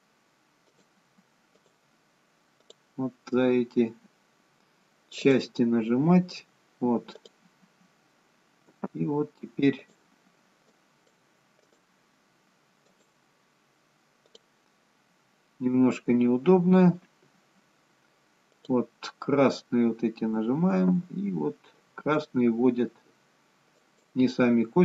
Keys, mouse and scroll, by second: 0.8 click, 4.4-5.3 scroll up 5, 5.3 click, 7.3 click, 9.1 g, 10.8 click, 12.5 click, 15.0 click, 15.1-15.8 scroll up 2, 15.8-16.8 scroll down 1, 16.8-17.4 scroll down 2, 18.6 click, 20.0-20.6 scroll down 2, 21.1 g.